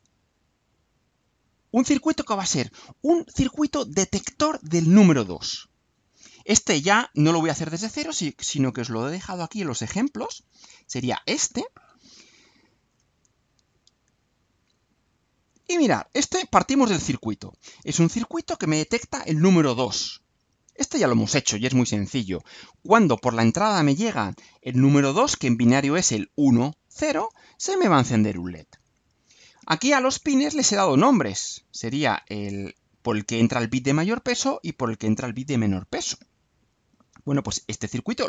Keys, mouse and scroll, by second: 0.7-2.7 drag, 11.1 click, 13.1-14.1 drag, 15.3 click, 17.4-18.7 right drag.